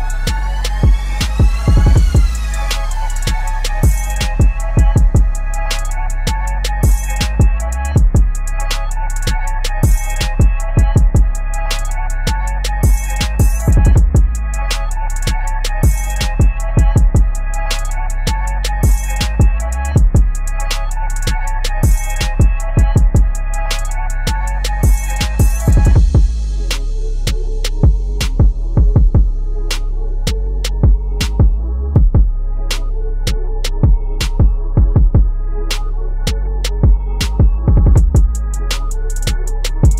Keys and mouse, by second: 4.6 t, 5.1 click, 6.2-7.2 typing, 8.5-13.7 typing, 15.9 click, 18.9 b, 19.6-26.3 drag, 26.7 shift+Up, 27.7 Up, 29.0 ctrl+click, 34.3 ctrl+z, 34.9 click, 37.4 ctrl+a.